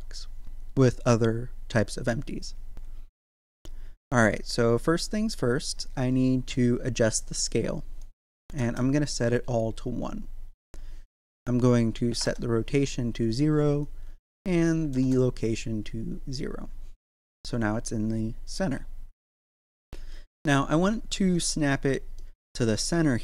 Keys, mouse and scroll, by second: 7.1-11.2 drag, 13.8-16.8 drag, 16.8-17.3 scroll up 1, 17.3 z, 20.3 right click, 21.1 Tab, 22.2 middle click, 22.8 scroll up 1.